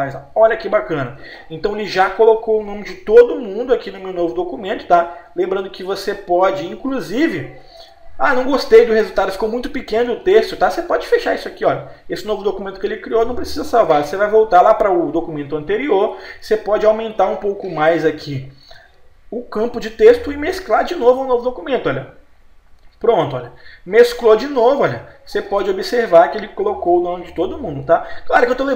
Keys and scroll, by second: 0.6 Page_Up, 3.4 Page_Down, 4.8 Page_Up, 6.4 Page_Down, 10.5 F4, 24.5 Page_Down, 27.8 Right.